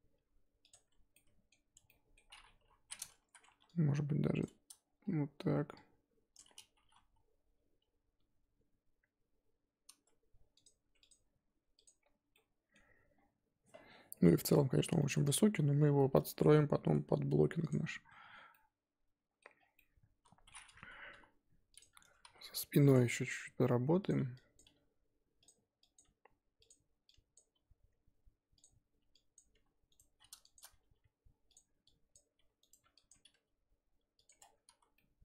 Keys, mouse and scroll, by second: 0.7 Tab, 1.1 middle click, 1.7 Tab, 1.9 middle click, 2.2-2.6 scroll up 2, 2.6 KP_3, 2.9 scroll up 1, 3.3 z, 4.4 click, 4.9-6.3 scroll down 1, 6.3 click, 6.4 scroll up 2, 6.7 g, 10.8 Tab, 11.1 click, 11.8 click, 12.3 middle click, 13.1-15.0 scroll down 5, 15.0 middle click, 15.2 click, 15.5-16.2 scroll up 3, 16.2-17.6 shift+middle drag, 17.6 click, 18.1-18.5 scroll down 4, 18.5-19.5 middle drag, 19.5 scroll down 3, 19.7 middle click, 20.6 scroll up 1, 21.1 KP_3, 21.8 click, 21.9 scroll up 5, 22.0 Tab, 22.2 z, 23.0 shift+middle click, 23.3-23.6 scroll up 1, 24.1 click, 24.5 click, 24.6 g, 25.9 click, 26.0 g, 27.3 click, 27.5 g, 29.3 click, 29.5 g, 30.5 shift+click, 30.8 g, 32.1 click, 32.3 g, 33.1 ctrl+click, 33.3 g, 34.4 Tab, 34.8 z, 34.9 scroll down 1, 34.9 middle click.